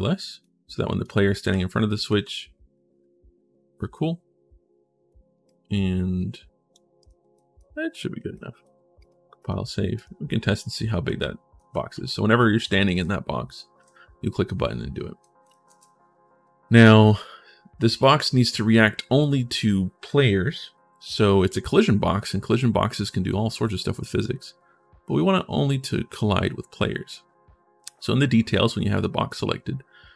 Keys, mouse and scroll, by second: 0.2 click, 1.0-2.3 typing, 1.1 right click, 5.2-6.5 drag, 6.8-8.1 right drag, 7.1 d, 7.3 d, 7.9 a, 8.8 click, 9.2 e, 10.5-13.2 typing, 15.3-16.6 ctrl+shift+middle drag, 16.6 click, 16.7 e, 17.8 click, 25.3 middle click, 28.7 click, 29.6 scroll down 1.